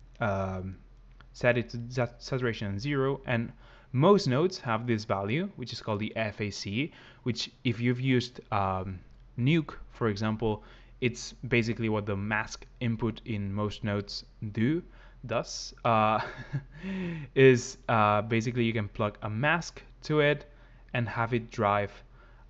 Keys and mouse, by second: 0.0 click, 1.5 click, 14.8 click, 15.7 click, 17.9 click.